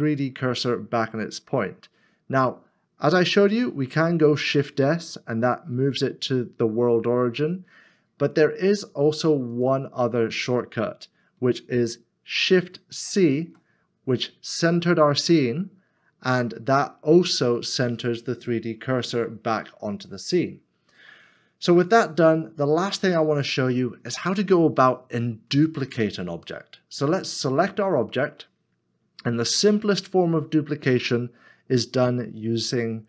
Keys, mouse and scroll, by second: 4.1 x, 4.4 shift+s, 12.9 shift+c, 16.1 scroll down 1, 18.6 scroll down 1, 21.0-21.7 scroll down 1, 21.7 middle click, 22.6-23.0 scroll down 1.